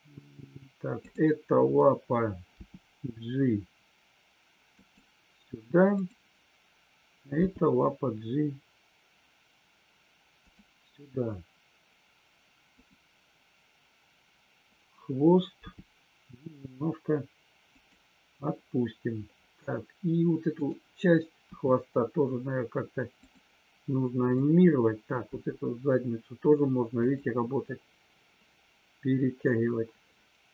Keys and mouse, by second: 0.9 click, 4.8 click, 5.9 click, 7.3 g, 10.3 click, 17.7 click, 20.6-21.2 drag, 21.4 r, 24.2 click, 25.3 r, 26.9 click.